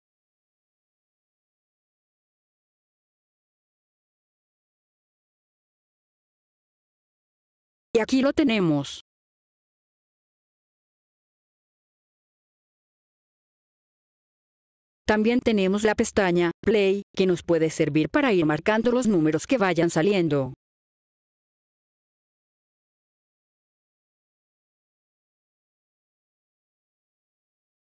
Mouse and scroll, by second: 7.5 click, 14.5 click, 17.1 click, 21.3 click, 25.3 click, 26.1 click, 26.7 click, 27.2 click.